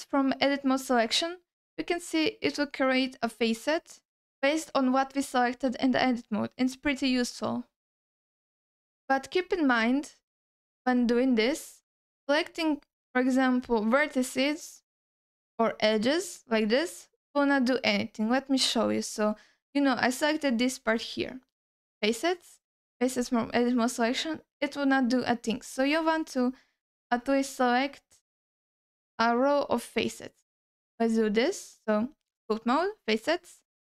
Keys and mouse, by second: 1.7 alt+middle click, 5.8-7.0 shift+drag, 9.8 click, 11.0 middle click, 11.5 ctrl+alt+middle click, 12.5 click, 13.6 click, 15.6 click, 17.8-18.8 drag, 21.5-23.3 drag, 24.8-25.8 drag, 26.6-27.2 drag, 28.6 click, 29.5 click, 31.1-32.2 drag, 32.8-33.6 drag.